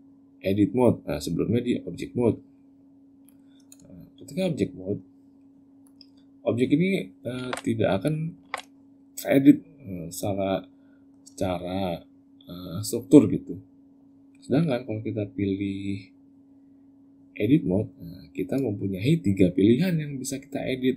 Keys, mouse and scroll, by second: 3.0 click, 5.6 click, 6.6 click, 7.2 ctrl+z, 7.8 click, 8.2 ctrl+z, 8.9 middle click, 10.6 middle click, 15.5 click.